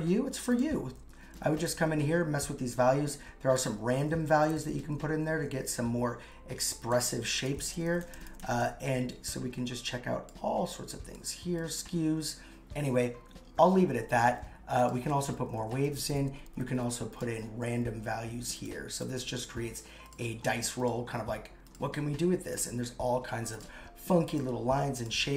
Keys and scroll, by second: 1.4 shift+Up, 1.9 shift+Up, 4.3 shift+Down, 4.8 shift+Down, 7.5 shift+Up, 8.0 shift+Up, 15.6 shift+Up, 16.1 shift+Up.